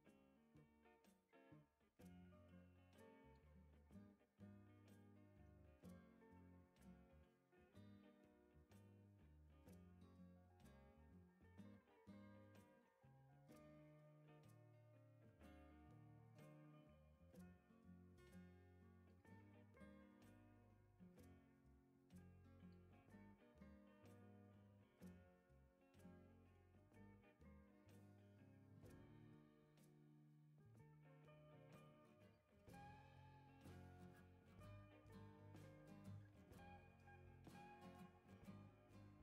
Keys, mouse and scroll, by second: 0.9 ctrl+click, 3.7 click, 4.1-5.4 typing, 7.5 click, 8.6 ctrl+click, 10.6 click, 11.0-12.3 typing, 13.5-14.2 scroll down 6, 14.6-14.9 right drag, 15.2 right click, 15.7 right click, 16.7-17.1 scroll down 2, 17.4-17.7 right drag, 21.4 click, 23.4 scroll down 2, 23.7-24.3 right drag, 24.5 scroll down 1, 27.5 click, 29.4 middle click, 29.4 scroll down 2, 29.6 right click, 31.4 click, 31.8 1, 32.3 0, 33.9-34.4 scroll up 4, 34.6 click, 35.0-35.8 scroll up 6, 37.4 click.